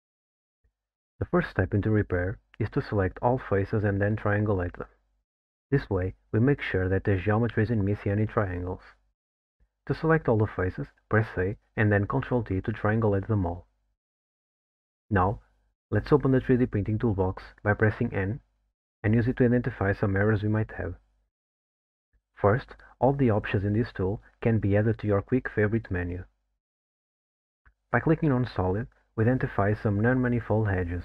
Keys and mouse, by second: 1.8 click, 5.7 middle click, 12.7 ctrl+t, 14.7 click, 26.9 click.